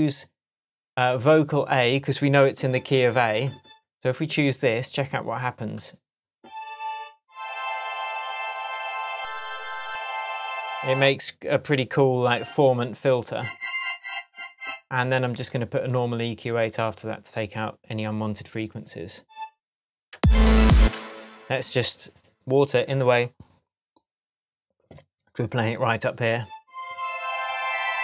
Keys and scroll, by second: 20.1 space.